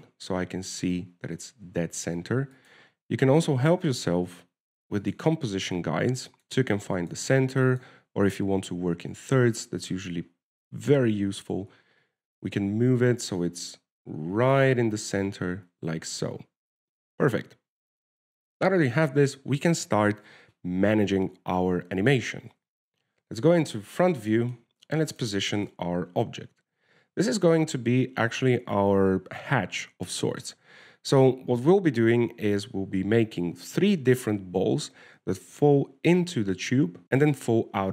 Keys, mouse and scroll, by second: 3.9 click, 6.4 click, 7.6 click, 8.3 click, 9.0 click, 10.5 shift+middle click, 10.8 scroll down 1, 10.9 scroll up 1, 11.2 shift+middle click, 11.6-12.1 scroll up 3, 12.5 g, 16.2-18.6 scroll down 1, 18.6-18.9 scroll down 2, 18.9-19.3 scroll up 3, 22.0 w, 23.8 alt+a, 24.4 KP_1, 25.3 scroll down 1, 25.7 shift+middle click, 26.4 right click, 26.7 shift+middle click.